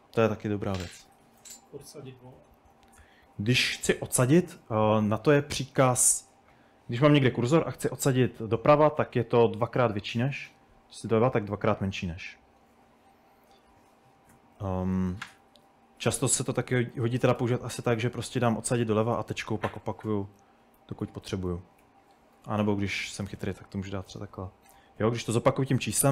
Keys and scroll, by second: 0.0-2.1 typing, 4.3-6.4 typing, 9.0 typing, 11.0 typing, 14.1-17.0 typing, 18.1-24.3 typing.